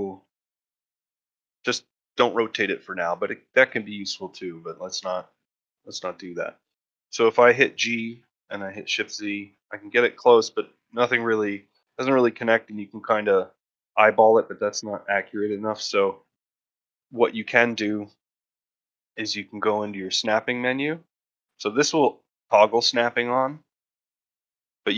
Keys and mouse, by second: 0.3-0.6 shift+middle drag, 5.7 ctrl+middle drag, 6.1 shift+middle click, 15.6 middle click, 16.7-17.0 shift+middle drag, 22.3 click, 23.0 click.